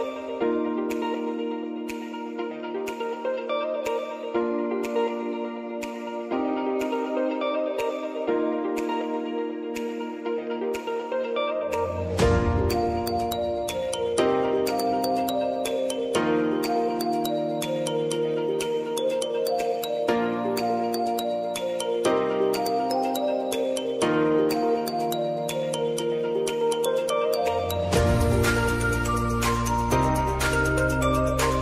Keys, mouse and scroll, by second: 0.0-1.4 typing, 2.6 shift+-, 3.7-4.7 typing, 5.7 click, 19.8-22.2 typing, 22.9 click, 24.4 shift+i, 25.7 click, 28.0 ctrl+alt+Home, 29.8-31.6 drag.